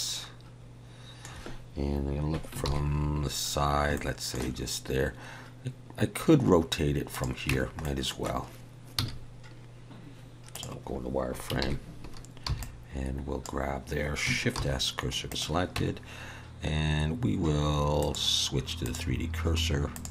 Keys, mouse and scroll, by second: 2.6 ctrl+KP_3, 3.9 shift+middle click, 7.1 click, 7.5 Tab, 7.8 middle click, 9.0 z, 11.6 ctrl+KP_3, 12.5 b, 14.5 shift+s, 15.8 Tab, 18.0 click.